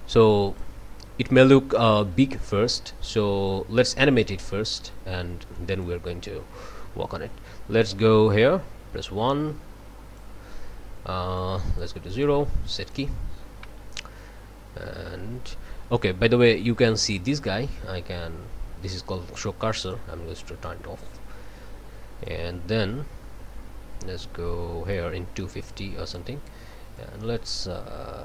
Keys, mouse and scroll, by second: 3.2 click, 5.5 right click, 7.9-10.4 drag, 11.4-12.0 drag, 12.1 right click, 12.8 click, 19.8 click, 22.2-26.4 drag, 26.9-28.2 drag.